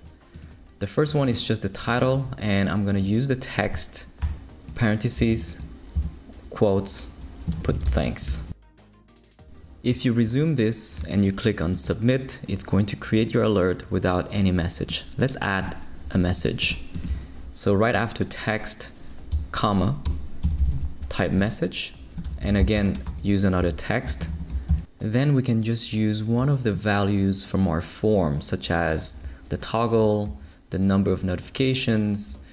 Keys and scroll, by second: 4.2 shift+9, 5.3 shift+', 5.9 shift+Left, 6.7 Left, 7.4-8.8 typing, 9.2 shift+super+i, 20.2-24.2 typing, 21.4 Return, 23.6 shift+Left, 24.7 shift+Left.